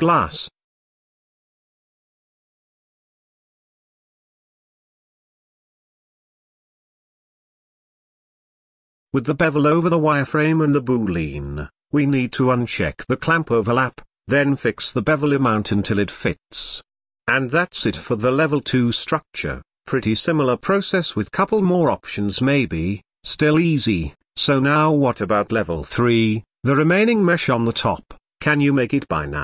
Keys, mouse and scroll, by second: 0.0-2.2 drag, 2.5-3.0 shift+middle drag, 3.0-4.0 scroll up 1, 4.0 ctrl+a, 6.0-7.5 scroll up 4, 8.1-9.5 drag, 10.2-11.2 shift+middle drag, 11.2 scroll down 2, 11.4-13.0 shift+middle drag, 13.0-14.9 drag, 16.2-17.5 drag, 18.2-19.2 drag, 19.1 alt+h, 19.4-19.9 scroll down 6, 19.9 click, 20.2-22.1 typing, 21.0 scroll down 3, 21.8 middle click, 22.0 Tab, 22.8 Tab, 22.9 shift+middle click, 23.0 scroll up 4, 23.1 shift+middle click, 23.3-23.7 scroll down 2, 24.1 shift+f, 26.2-28.8 middle drag, 28.7 scroll up 1.